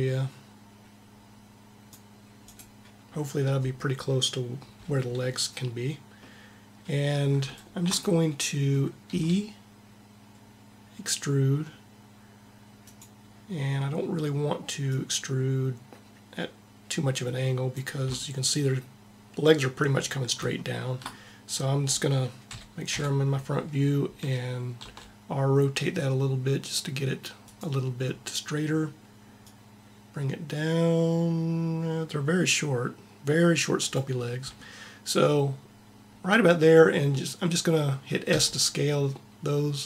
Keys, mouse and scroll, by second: 2.9-4.9 middle drag, 8.9 e, 14.9-16.7 drag, 22.4 KP_3, 22.5 KP_3, 22.8 KP_1, 23.0 KP_1, 24.7 r, 29.3-31.0 drag, 38.2 s.